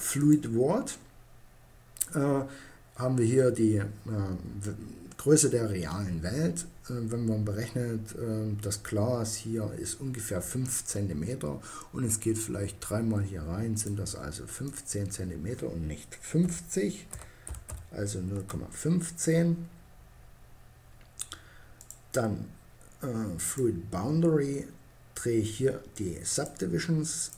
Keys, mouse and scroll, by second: 1.0-13.0 middle drag, 15.4 middle click, 20.9-24.2 drag, 25.4-27.3 drag.